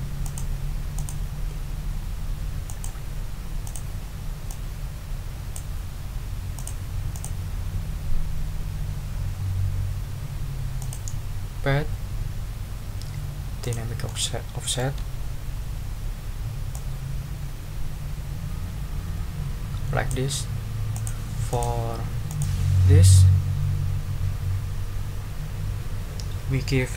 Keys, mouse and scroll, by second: 0.2 click, 0.9 click, 2.6 click, 3.6 click, 4.5-5.7 drag, 6.5 click, 7.1 click, 10.8 click, 13.6 click, 14.0 click, 15.2-15.7 ctrl+scroll up 4, 16.7-20.3 drag, 20.9 click, 21.5 click, 22.3 click.